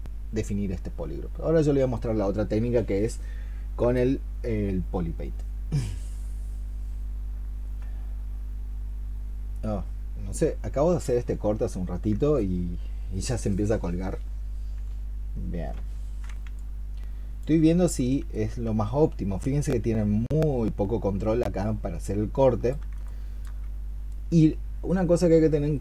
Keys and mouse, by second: 22.9 alt+click.